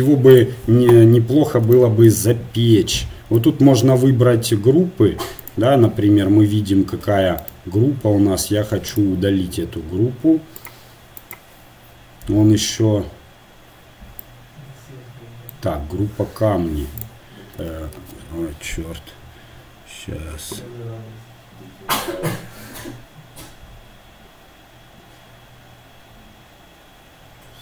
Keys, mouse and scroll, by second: 0.3-2.3 right drag, 18.0 shift+g, 18.5-27.6 right drag.